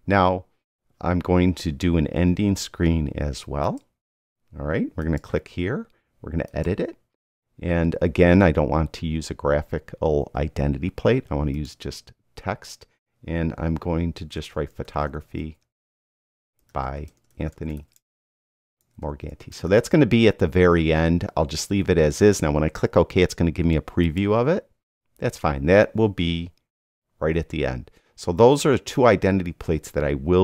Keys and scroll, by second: 14.6-20.3 typing.